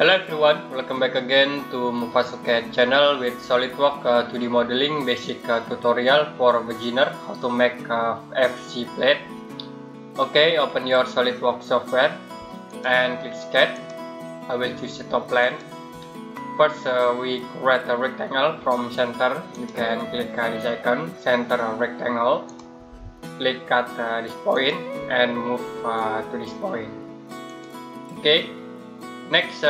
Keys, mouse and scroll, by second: 12.5 click, 19.3 click, 22.3 click, 27.3 click.